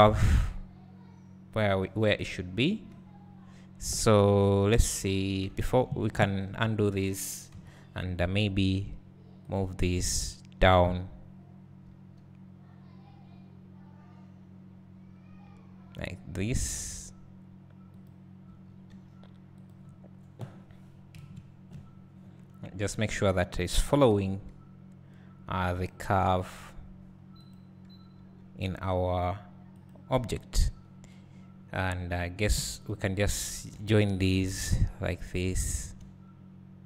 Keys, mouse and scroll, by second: 5.7 ctrl+z, 7.5 KP_1, 9.5 shift+click, 12.1 g, 15.9-17.9 drag, 18.6 g, 19.7-21.2 drag, 21.2 KP_Decimal, 22.6 middle click, 25.7 g, 25.8 click, 26.4 r, 28.3 g, 32.1-32.5 scroll up 2, 32.5 alt+a, 32.9-33.3 drag, 34.5 j, 35.3 click, 35.7 shift+click.